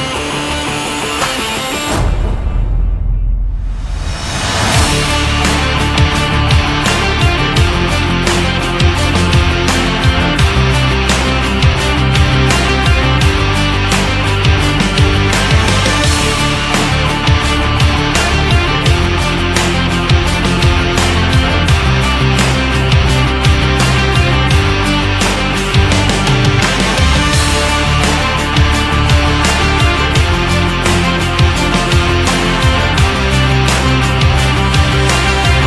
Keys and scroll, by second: 0.2 ctrl+=, 13.9 shift+Right, 22.2 shift+Left, 26.3 ctrl+0, 26.6 ctrl+-, 34.3 ctrl+z.